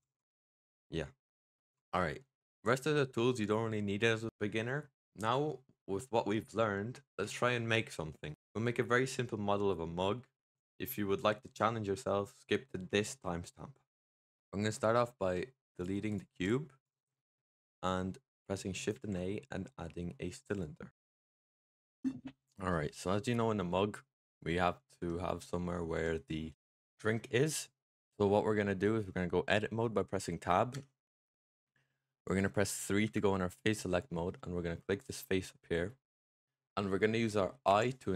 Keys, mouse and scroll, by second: 0.3-1.6 middle drag, 1.6 click, 14.5 click, 14.8 x, 16.0 click, 16.2 x, 18.8 shift+a, 23.2-24.1 middle drag, 24.1 click, 24.8 Tab, 25.8 Tab, 30.6 Tab, 32.1 click, 32.9 3, 33.9 middle click, 34.9 click, 37.5 i.